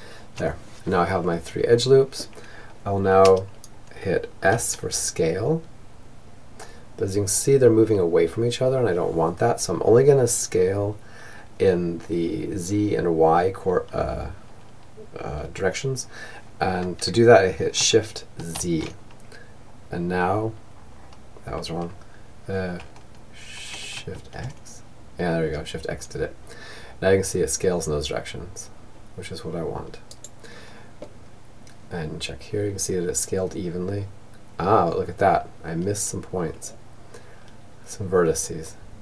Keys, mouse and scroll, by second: 3.1 s, 29.4-31.1 middle drag, 31.3 middle click, 31.8 middle click.